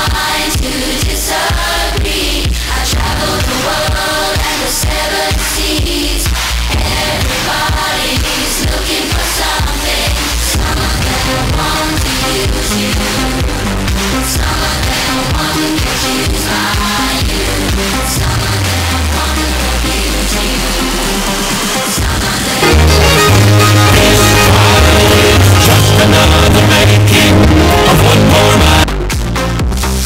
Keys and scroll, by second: 0.5 Down, 0.6 Down, 1.5 Down, 1.5 Return, 29.6 Page_Down.